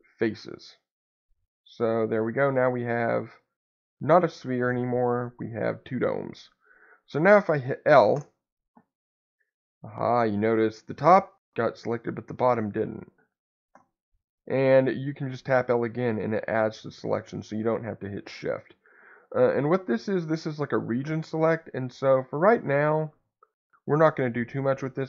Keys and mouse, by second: 1.6-2.6 middle drag, 3.3-6.6 middle drag, 9.0-10.9 middle drag, 12.3 middle click, 14.4-15.9 middle drag.